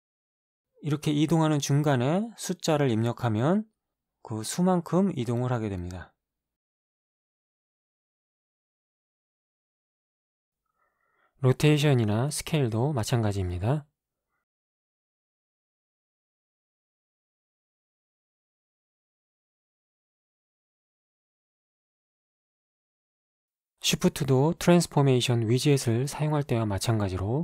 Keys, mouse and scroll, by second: 3.6 KP_5, 4.7 Return, 6.1 g, 6.7 x, 7.7 -, 8.5 5, 9.4 Return, 11.1 r, 12.8 y, 14.6 4, 14.8 5, 15.8 Return, 19.2 s, 21.7 x, 26.7 g.